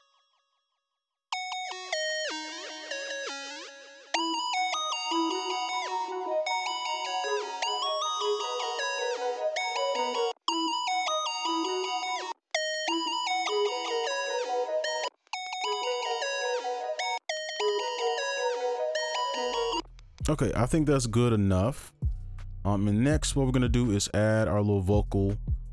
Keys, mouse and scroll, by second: 3.3 click, 3.6-4.1 scroll down 2, 4.6 right click, 10.3 space, 10.4 space, 12.3 space, 12.7 right click, 12.8 space, 15.0 space, 15.5 right click, 15.6 space, 17.1 space, 17.4 right click, 17.6 space, 17.7 right click, 19.7 space, 21.2 double click, 23.7-24.9 scroll down 1, 24.9-25.7 scroll up 1.